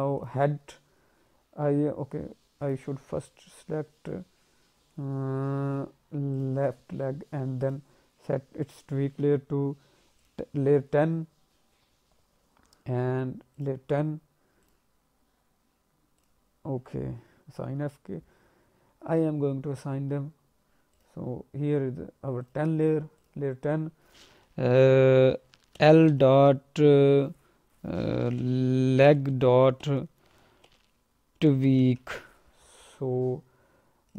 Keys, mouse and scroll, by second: 0.1 click, 1.2-1.7 scroll down 2, 2.6 click, 6.3 click, 7.0-7.4 scroll up 2, 7.6 click, 10.2 click, 13.5 click, 14.6 click, 16.2 click, 20.9 click, 21.7 click, 22.4 click, 22.8 click, 23.1 click.